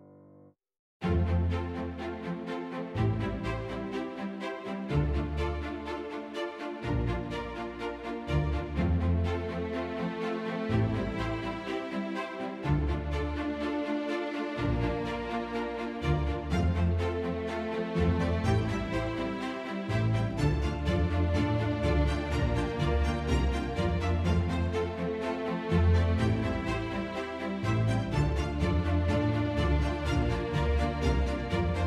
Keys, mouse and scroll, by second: 0.4 click, 1.2 F1, 1.7 F2, 3.4 click, 4.0 F1, 5.0 click, 5.4 click, 8.5 click, 10.2 ctrl+shift+c, 11.0 F2, 15.3 click, 16.1 click, 16.3 Delete, 17.1 click, 17.3 Delete, 19.0 click, 20.4 click, 22.1 click, 22.6 click, 23.2 click, 23.8 click, 25.0 click, 25.5 click, 26.3 click, 27.9 click, 29.3 click, 30.4 click, 31.0 click, 31.6 click.